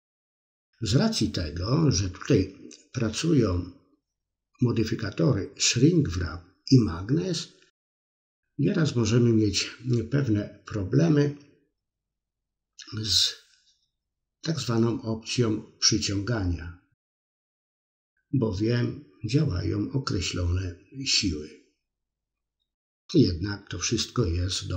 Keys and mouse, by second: 0.4 f, 1.6 f, 2.2-3.7 middle drag, 5.2 middle click, 5.8 middle click, 7.3 click, 7.9 click, 8.3 middle click, 9.0-10.5 drag, 10.7 middle click, 11.0 middle click, 11.5 click, 12.0 middle click, 13.7 middle click, 14.3-15.3 ctrl+drag, 15.5 middle click, 16.1 click, 16.4 middle click, 16.9 middle click, 17.4 middle click, 17.8-19.0 ctrl+drag, 19.1 middle click, 19.7 middle click, 20.1 click, 20.7 click, 21.1 middle click, 22.4 middle click, 23.1 click, 23.7 click, 24.2 middle click.